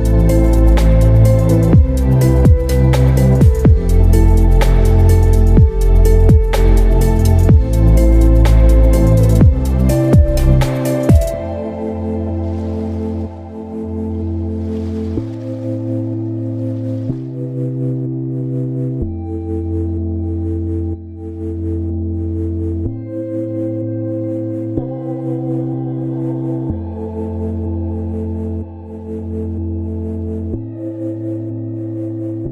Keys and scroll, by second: 12.6 6, 12.9 0, 25.1 ctrl+alt+shift+e.